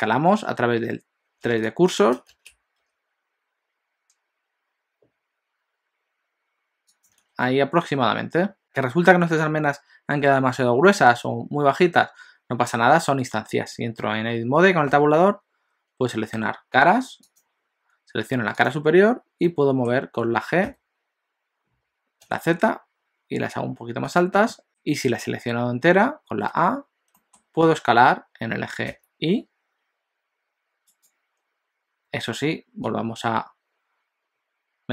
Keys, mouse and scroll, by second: 7.2 alt+a, 7.4 middle click, 14.9 Tab, 17.2 click, 18.7 click, 19.5 middle click, 20.7 g, 24.5 middle click, 27.1 middle click, 27.6 s, 33.0 click.